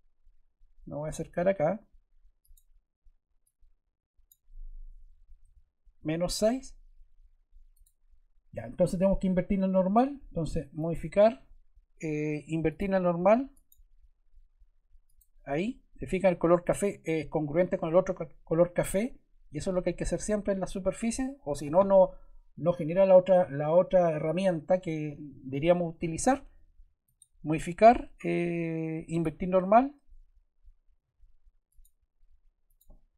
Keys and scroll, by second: 5.4 -, 5.9 6.